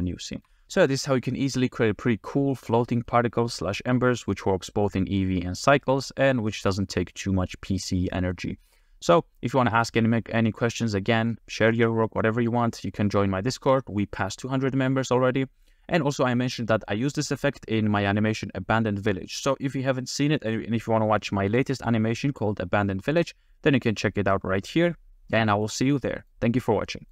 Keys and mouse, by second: 0.3 shift+middle click, 3.1-4.4 middle drag, 5.2-6.0 middle drag, 6.5-7.0 middle drag, 8.4-9.3 middle drag, 10.0-10.9 middle drag, 11.4-11.8 middle drag, 12.2 middle click, 20.6-21.6 middle drag, 22.8 middle click, 25.7-26.3 middle drag, 26.9 middle click.